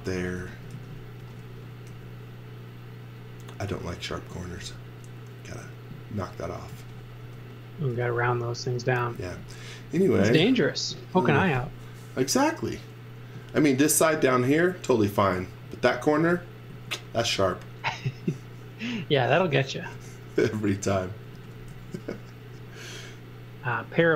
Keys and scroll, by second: 0.0-1.9 typing, 4.6 b, 6.7-9.9 typing, 13.3 z, 13.6 x, 14.6 x, 16.2 x, 16.7 z, 17.7 z, 19.1 z, 19.9 space, 21.3 x, 21.7 z.